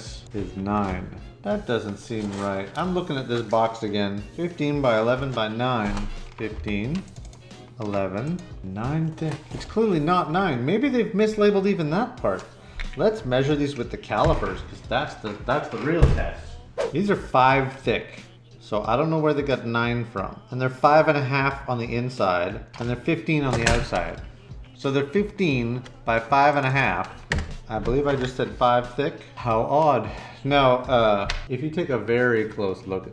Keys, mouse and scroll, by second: 0.8 Return.